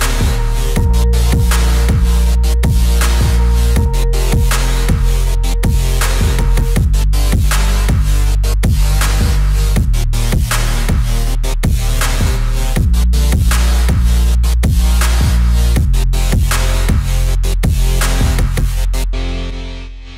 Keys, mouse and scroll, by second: 15.6 click, 16.2 space, 16.9-20.1 drag.